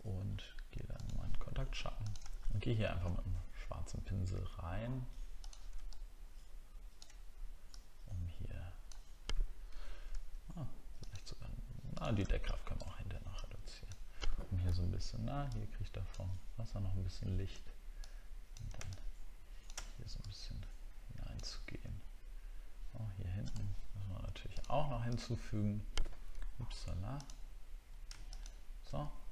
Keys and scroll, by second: 2.3 alt+scroll up 1, 9.7 ctrl+z, 14.7 ctrl+z, 26.3 ctrl+z.